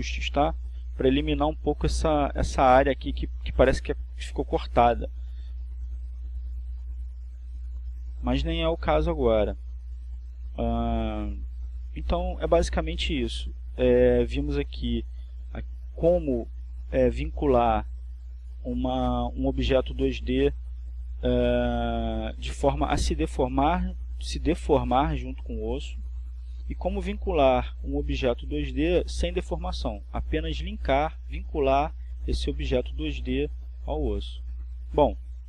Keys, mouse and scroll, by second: 5.1 click, 9.5 r, 16.4 click, 19.2 r, 23.0 click, 30.8 right click, 31.8 r, 34.8 click.